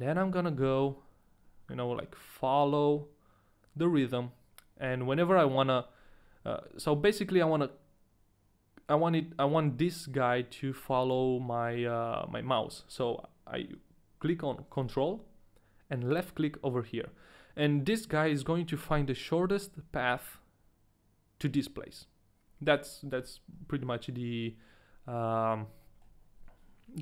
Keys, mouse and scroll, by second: 0.5 scroll up 1, 17.0 ctrl+right click, 23.9 ctrl+z, 25.2 middle click, 26.1 ctrl+z, 26.1 middle click.